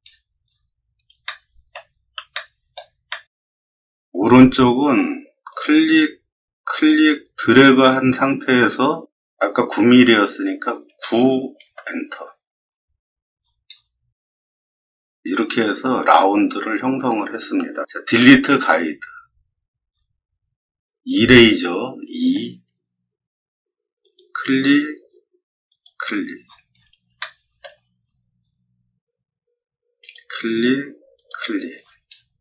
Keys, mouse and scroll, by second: 0.0 middle click, 0.4 middle click, 1.2 shift+middle click, 2.3 shift+middle click, 3.0 shift+middle click, 3.8 middle click, 5.4 click, 6.7 click, 10.8 9, 11.6 Return, 13.3 middle click, 13.3-13.7 scroll down 4, 13.7 middle click, 14.1 shift+middle click, 15.1 middle click, 18.4 d, 19.3 middle click, 19.8 middle click, 22.2 e, 24.0 click, 25.6 click, 26.3 middle click, 26.7 middle click, 27.1 shift+middle click, 27.9 middle click, 27.9-28.6 scroll up 5, 28.3 middle click, 29.9 click, 31.1 click, 31.7 scroll down 1, 32.1 middle click.